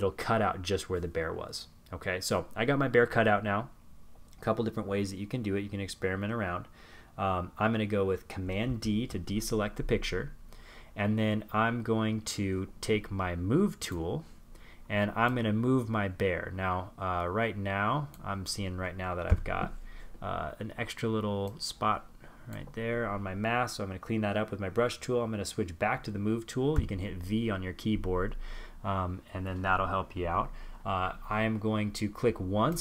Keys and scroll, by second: 6.5 super+d.